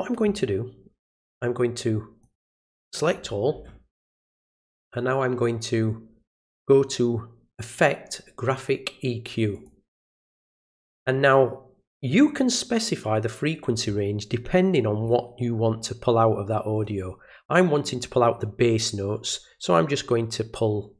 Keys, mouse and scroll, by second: 2.2 click, 4.6 click, 9.5 click.